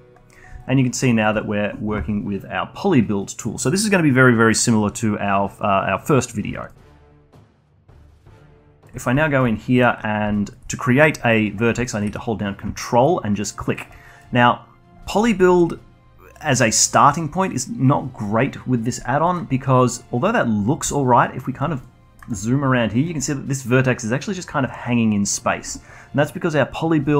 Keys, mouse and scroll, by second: 6.7 middle click, 7.2-7.6 alt+drag, 7.6 alt+middle click, 7.9-16.9 alt+drag, 19.2 middle click, 20.9-21.8 alt+drag, 21.8-22.3 alt+middle drag, 22.3-25.3 alt+drag.